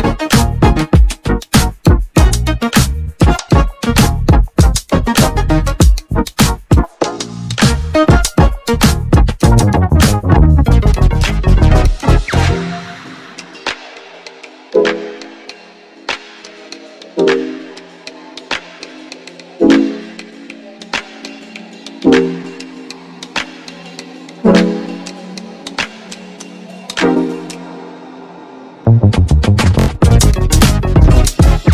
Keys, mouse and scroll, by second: 2.7-3.0 scroll up 2, 6.3-6.9 middle drag, 6.9 scroll down 1, 7.5-8.2 scroll down 3, 8.2-9.0 middle drag, 9.0 scroll down 1, 9.3-10.1 scroll up 3, 10.1-10.9 shift+middle drag, 10.9-11.6 scroll down 2, 11.6-14.1 scroll up 1, 14.2-16.5 drag, 16.5 Tab, 18.0 alt+e, 19.4 alt+e.